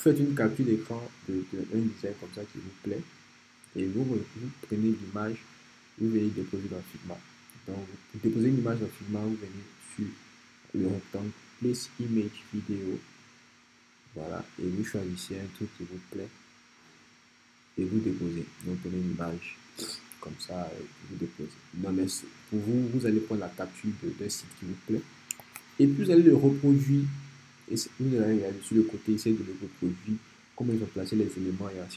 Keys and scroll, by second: 25.4 BackSpace.